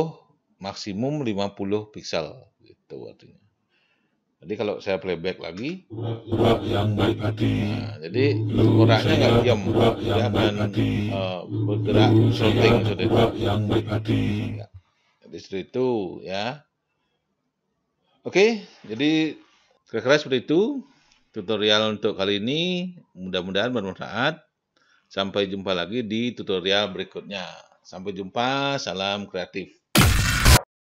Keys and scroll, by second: 6.0 0.